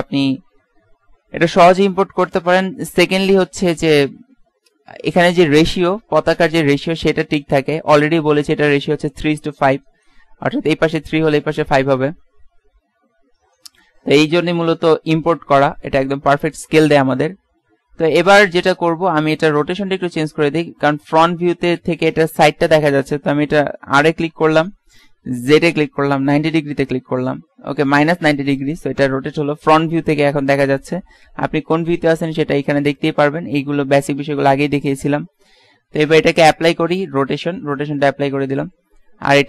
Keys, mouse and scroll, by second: 0.6 KP_3, 16.7-18.6 typing, 19.8 KP_7, 20.5-21.0 KP_1, 24.1 r, 36.4 ctrl+a, 38.6 middle click.